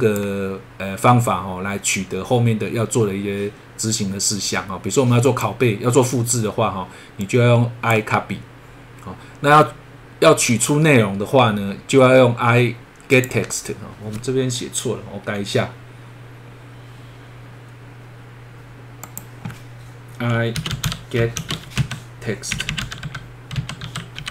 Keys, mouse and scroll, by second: 5.2 click, 7.2 click, 13.1 click, 13.9 scroll down 1, 16.5-18.4 scroll up 1, 19.0 click, 20.3-24.0 typing, 22.5 Left, 24.2 Delete.